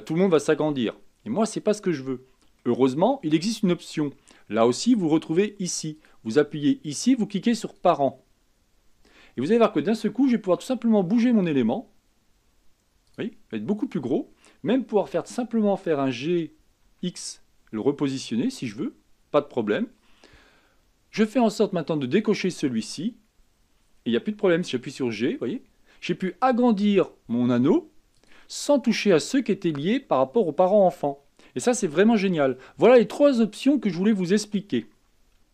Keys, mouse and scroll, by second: 1.5-2.9 scroll down 3, 2.9-6.0 shift+middle drag, 6.2-9.3 drag, 10.7 s, 15.3 g, 21.5-24.5 drag, 24.8 g.